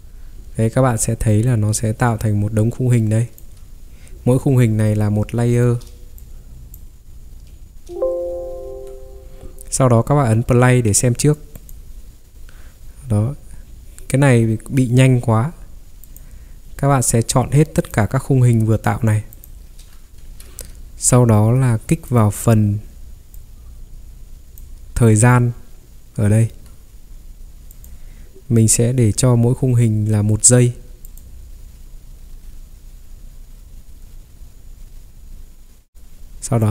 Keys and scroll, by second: 0.4 ctrl+3, 8.7 Escape, 20.2 ctrl+3, 26.5 Escape.